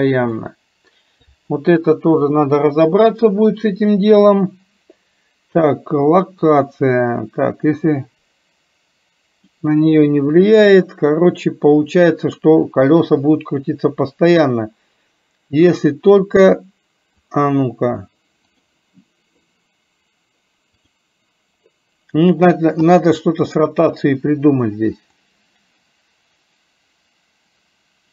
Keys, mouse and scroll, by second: 0.4 click, 7.8-9.6 drag, 17.3 click, 18.6 click, 25.3-28.1 drag.